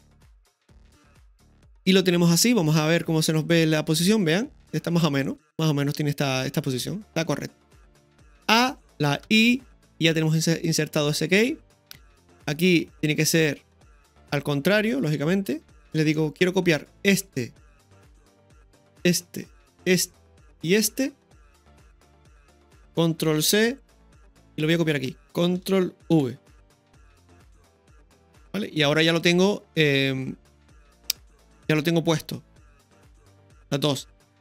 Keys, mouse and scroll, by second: 1.1 right click, 1.3 ctrl+KP_3, 3.4-4.8 drag, 8.3 a, 9.3 i, 12.6-15.8 drag, 15.8 shift+right click, 15.8-16.2 scroll down 1, 16.2 middle click, 16.4 scroll up 2, 17.1-18.2 right drag, 18.2 middle click, 19.1 shift+right click, 20.2 middle click, 21.4 shift+right click, 23.4 ctrl+c, 24.4 click, 26.1 ctrl+v, 27.4-34.4 drag, 27.4 space.